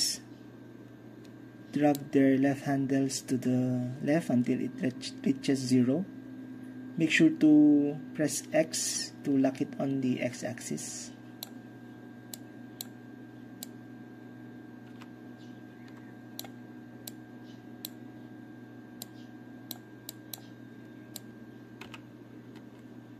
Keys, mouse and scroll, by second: 8.9 x, 11.5-12.0 drag, 12.9-13.7 drag, 15.0 x, 16.5-17.2 drag, 21.9 x, 22.0-23.1 drag.